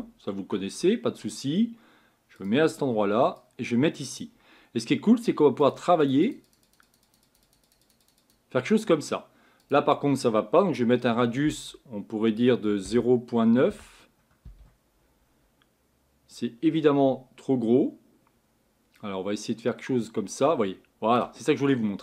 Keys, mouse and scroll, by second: 4.2 click, 5.7-14.5 drag, 19.4-21.7 drag, 21.7-22.0 scroll down 6.